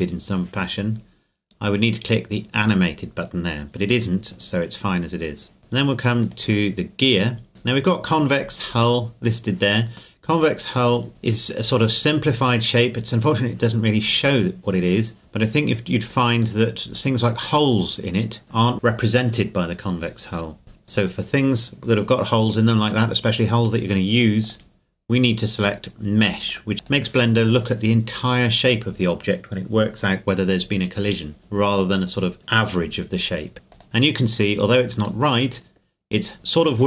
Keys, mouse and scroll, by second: 6.2 right click, 8.6 right click, 10.2 middle click, 11.1 click, 15.2 middle click, 24.4 click, 33.7 click, 35.2 middle click.